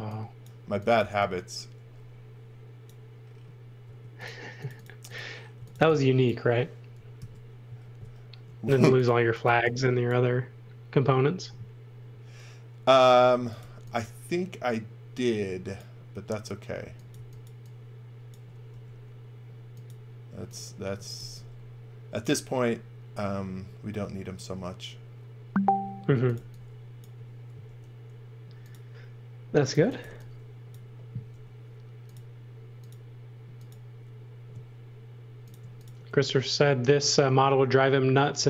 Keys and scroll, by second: 0.6 x, 0.9 v, 3.8 space, 5.5 v, 7.1 super+c, 7.8 super+v, 9.1 x, 9.4 v, 13.0-14.0 typing, 16.8 x, 17.1 v, 18.6 m, 20.7-21.6 typing, 25.8-27.6 typing, 29.5-31.3 typing.